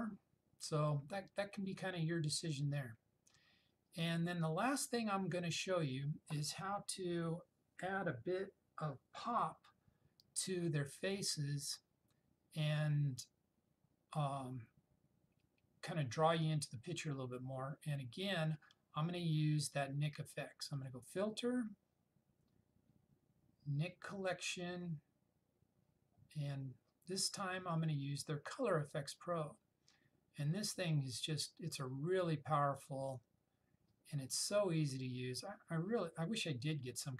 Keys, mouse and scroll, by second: 20.8 click, 20.9 click, 28.9 click.